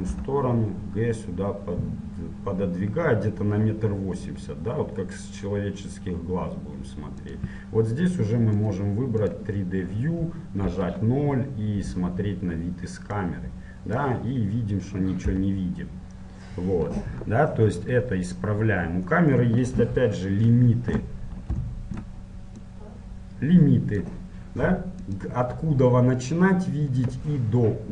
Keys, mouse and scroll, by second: 0.3 g, 10.2 click, 10.6-13.3 middle drag, 10.8 KP_0, 13.3-15.1 drag, 15.5 t, 18.1-19.9 middle drag, 19.9 KP_7, 21.0-22.1 middle drag, 22.8-24.9 drag, 25.2-27.9 drag.